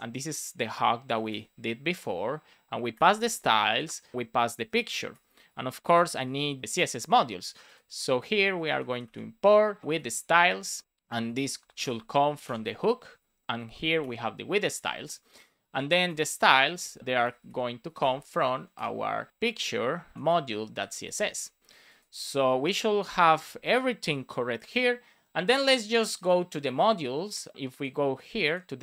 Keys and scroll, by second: 1.9 shift+9, 3.5 Right, 4.1 shift+9, 4.5 shift+[, 5.0 BackSpace, 5.4 shift+p, 6.5 BackSpace, 8.0 Return, 9.1 space, 11.1 shift+s, 11.2 Return, 11.5 space, 12.2 space, 13.4 Return, 14.6 super+s, 15.5 Right, 16.0 Return, 17.0 space, 19.6 shift+p, 20.1 Down, 20.2 Return, 21.2 super+s.